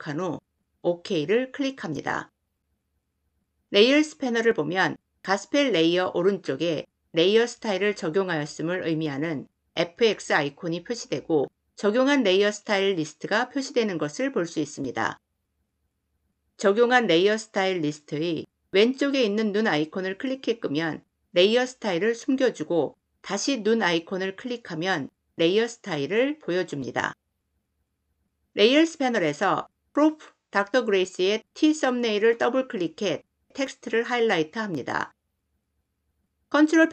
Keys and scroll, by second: 17.8 t.